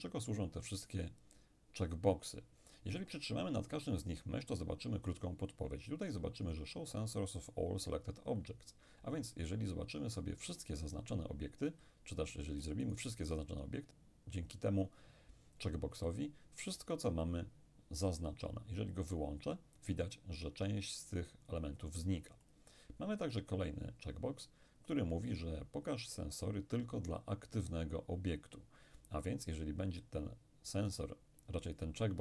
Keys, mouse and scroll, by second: 12.9 shift+right click, 19.0 click, 22.5 click.